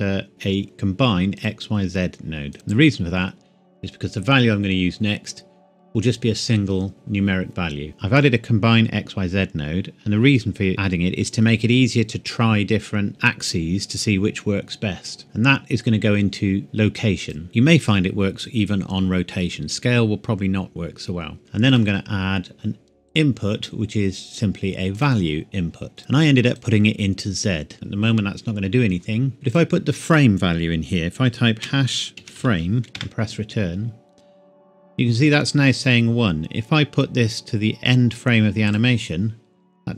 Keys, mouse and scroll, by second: 1.4 click, 7.9 click, 15.2 click, 21.4 shift+middle click, 21.7 click, 24.9 click, 26.5 click, 29.3 click, 32.3-32.9 typing, 32.9 KP_Enter, 38.6 click.